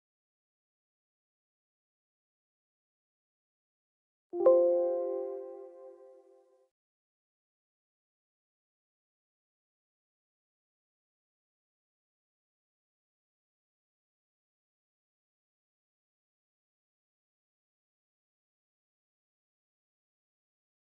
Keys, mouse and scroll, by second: 0.3-1.5 drag, 1.6 Delete, 2.0 click, 2.9 click, 4.0 click, 5.8 click, 8.0 click, 8.9-10.1 scroll down 4, 11.0 click, 11.2 click, 12.6-14.7 drag, 17.1 click, 17.8 click.